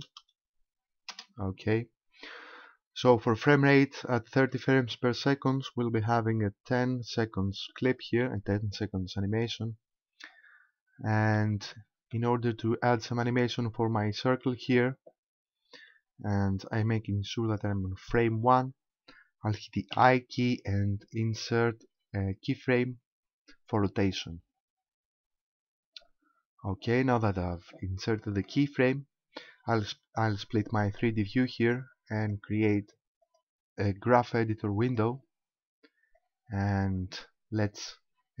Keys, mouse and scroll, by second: 11.4 middle click, 20.0 i, 31.0 click, 33.2 click, 36.2 click.